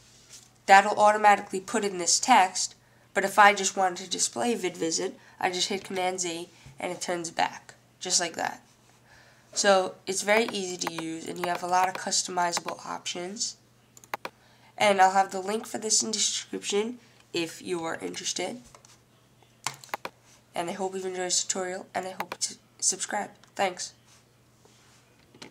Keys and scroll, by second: 0.0-0.3 typing.